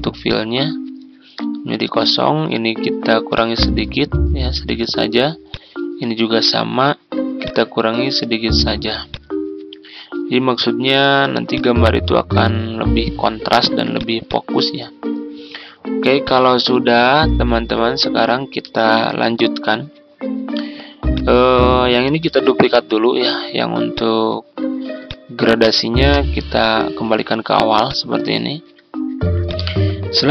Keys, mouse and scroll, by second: 22.2 ctrl+d, 22.8 click, 24.4-25.0 scroll down 1, 25.0 click, 28.3 ctrl+scroll down 1, 29.4-30.3 drag.